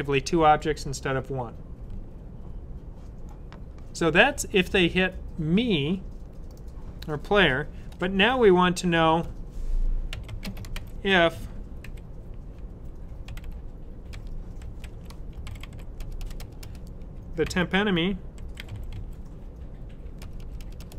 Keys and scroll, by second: 9.7-11.7 typing, 12.9-16.5 typing, 18.0-20.9 typing.